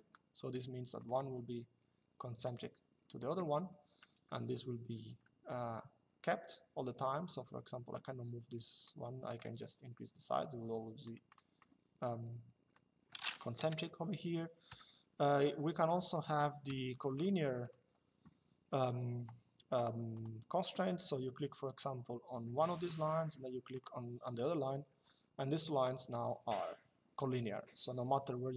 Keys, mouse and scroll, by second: 0.7 click, 2.1 click, 4.7 Escape, 5.2 click, 9.1 click, 11.0 click, 13.3 Delete, 14.9 click, 15.7 Escape, 16.9 click, 17.4 Escape, 19.8 click, 22.5 click, 24.6 Escape, 25.4 click.